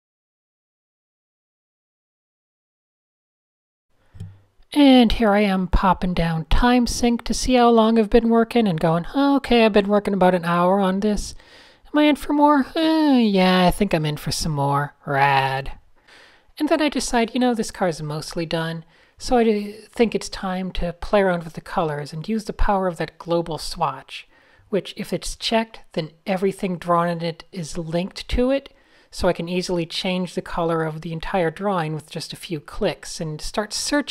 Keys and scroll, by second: 0.0-1.6 typing, 2.0 super+0, 3.8 Tab, 12.1-13.2 typing, 15.5 Tab, 18.2 Tab, 19.8 shift+x, 32.7 Tab, 33.8 Tab.